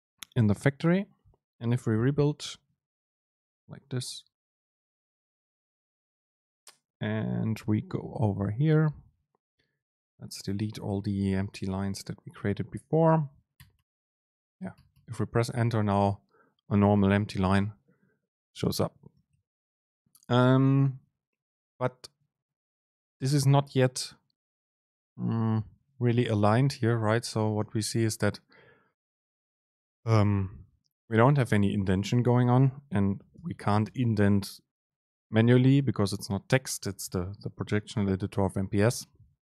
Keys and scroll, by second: 3.2 ctrl+shift+super+F9, 9.9 shift+Down, 11.0 BackSpace, 13.7 BackSpace, 18.7 BackSpace, 27.0 Up, 27.7 Down, 28.7 Up, 29.2 Down, 37.0 Up, 37.4 Down, 38.0 shift+Down.